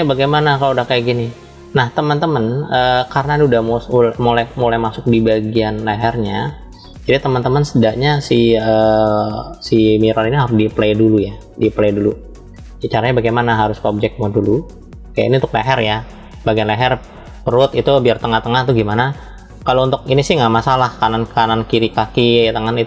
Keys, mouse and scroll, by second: 1.7 scroll down 3, 2.0-2.7 drag, 5.4 click, 6.1 click, 13.7-14.5 drag, 19.5 scroll down 2, 20.7 scroll down 2.